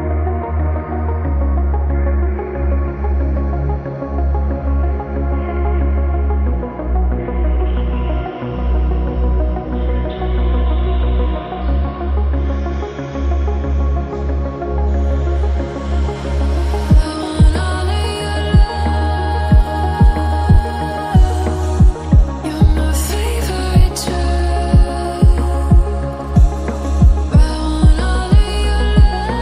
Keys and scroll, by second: 0.2 ctrl+z, 2.9-5.2 typing, 6.5 ctrl+z, 6.8 x, 8.1 ctrl+z, 8.6 ctrl++, 8.7 ctrl++, 9.2 ctrl+z, 12.1-13.2 typing, 14.5 ctrl+-, 14.6 ctrl+-, 15.1 ctrl++, 15.2 ctrl++.